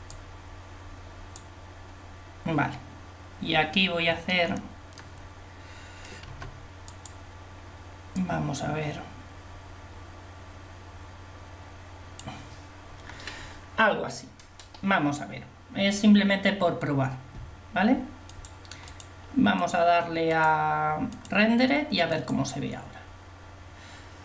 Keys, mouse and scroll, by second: 7.0 f, 8.3 click, 18.9-20.9 drag.